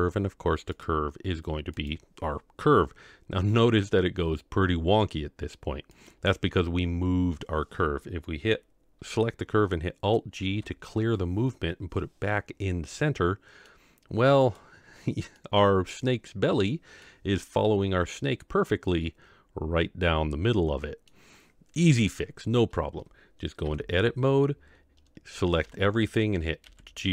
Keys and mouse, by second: 0.7 click, 6.0 click, 10.4 alt+g, 13.0-13.7 middle drag, 14.4 click, 15.4-17.0 middle drag, 18.9-21.1 middle drag, 23.6 Tab, 25.6 a, 26.6 g.